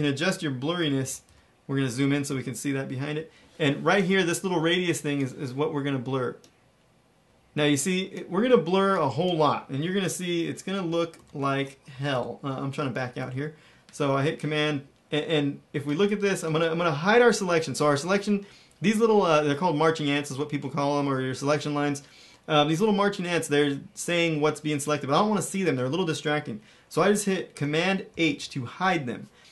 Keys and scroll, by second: 0.2 super+=, 0.7 super+=, 0.9 super+=, 1.2 super+=, 2.2 super+=, 11.1 shift+-, 11.8 shift+super+-, 13.1 -, 28.0 super+h.